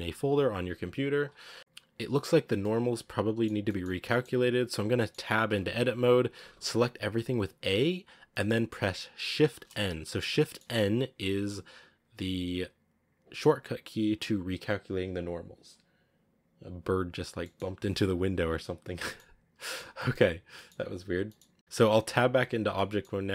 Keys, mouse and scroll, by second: 0.0-1.6 drag, 1.6-2.6 right drag, 2.6-3.9 middle drag, 3.9-4.4 scroll up 2, 4.0 middle click, 4.4-4.9 scroll down 2, 4.9-5.4 middle drag, 5.4 Tab, 6.2 a, 6.4 a, 7.8-8.2 scroll down 1, 8.2 middle click, 8.6-9.4 scroll up 2, 9.4 shift+n, 10.3-19.1 middle drag, 19.1-19.5 scroll up 1, 19.5 shift+middle click, 20.3 scroll down 1, 20.4-22.0 middle drag, 22.0 Tab, 22.5 scroll down 2, 22.6-23.0 middle drag, 23.0 scroll up 2.